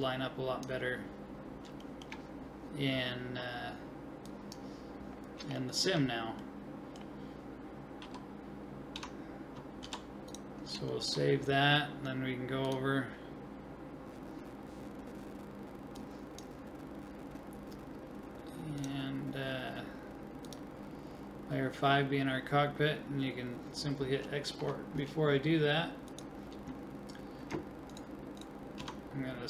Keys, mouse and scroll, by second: 0.2-1.9 drag, 1.9-4.3 middle drag, 4.3-6.1 drag, 6.7-8.3 middle drag, 8.0 a, 9.0 Tab, 10.9 ctrl+middle click, 12.7 ctrl+click, 13.3-14.5 drag, 16.0-17.6 drag, 20.4-21.4 drag, 21.4 middle click, 22.2 click, 24.3-26.1 middle drag, 26.2-27.7 drag, 27.9-29.4 right drag, 28.8 Tab.